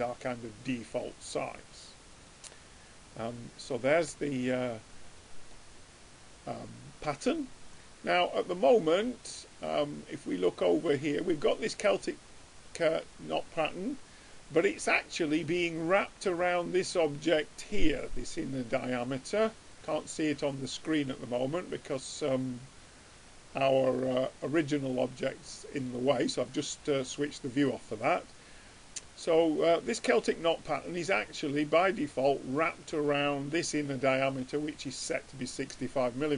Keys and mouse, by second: 0.0-1.0 drag, 1.0-2.8 middle drag, 3.8-5.1 drag, 4.4 right click, 5.1 right click, 5.2-6.4 middle drag, 10.1-13.4 drag, 15.8-17.6 drag, 18.5-20.9 middle drag, 21.4-25.8 drag, 25.0-26.8 middle drag, 25.0 right click, 35.5-36.3 drag.